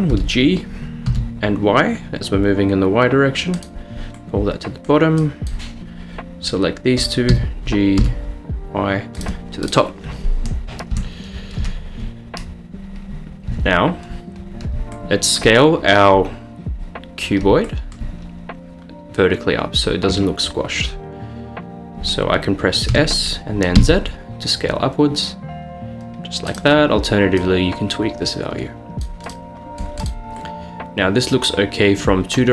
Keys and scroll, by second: 0.2 g, 1.1 y, 7.3 g, 8.2 y, 11.0 Caps_Lock, 13.5 Tab, 23.1 s, 24.0 z.